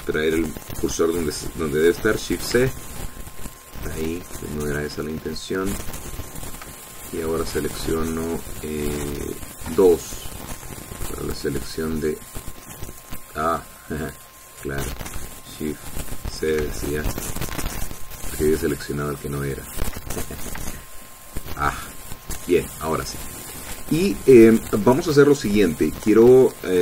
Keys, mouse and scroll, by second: 3.2 shift+c, 3.9-4.4 shift+scroll up 3, 4.6-5.8 shift+drag, 6.3 scroll up 1, 6.8 shift+click, 8.2 click, 10.7 2, 11.7 click, 15.3 click, 17.3 shift+c, 18.0-18.5 shift+scroll up 3, 18.7-20.1 shift+middle drag, 20.5 shift+middle click, 21.1 ctrl+shift+middle click, 22.7 click, 23.6 scroll up 1, 24.3 shift+middle click, 24.6 shift+click.